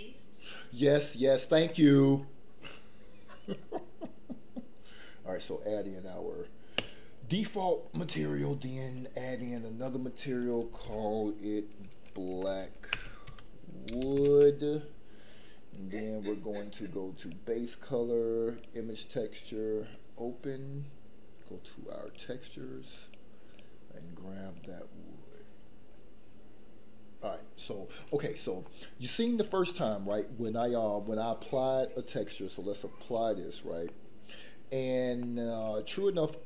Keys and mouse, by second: 6.9 click, 9.7 click, 10.3-14.3 drag, 14.3 o, 17.3-18.7 drag, 19.8 click, 28.7 middle click, 29.7 shift+middle click, 30.1 shift+middle click, 30.6 middle click, 33.1 click, 33.8 middle click, 35.2 shift+middle click.